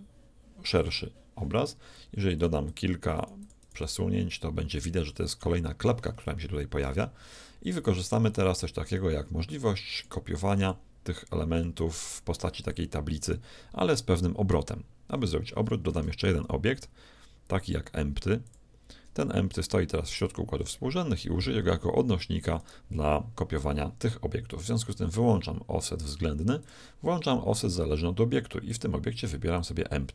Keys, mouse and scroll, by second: 2.4-5.7 drag, 6.2 z, 8.1-13.4 drag, 15.9 shift+a, 22.7-24.6 right drag, 24.6-26.4 drag, 26.7-28.4 drag, 28.8-30.1 drag.